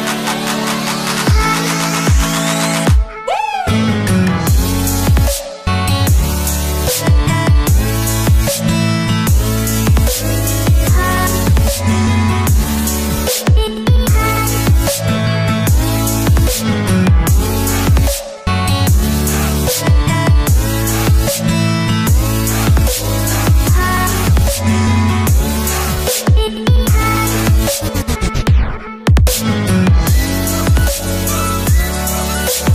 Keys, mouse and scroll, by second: 10.2 click, 11.9 scroll up 1, 13.1-13.8 alt+scroll up 2, 14.4 click, 17.8-21.8 drag, 26.1-26.7 click.